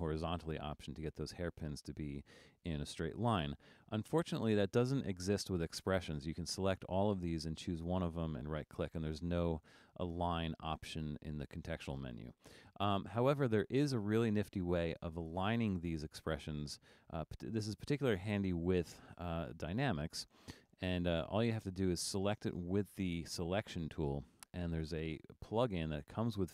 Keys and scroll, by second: 2.6 super+z.